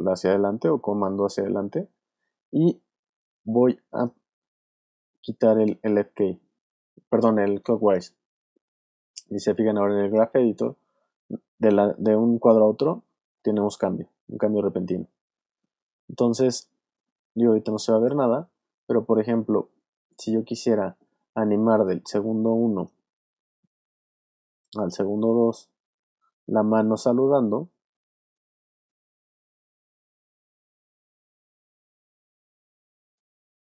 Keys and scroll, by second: 27.4 space.